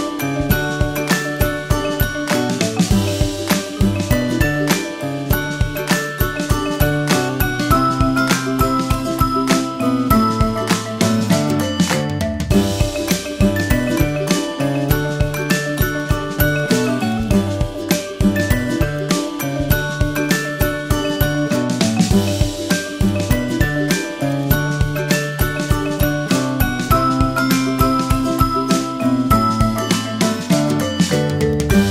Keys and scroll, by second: 3.0 super+0, 28.4 super+t.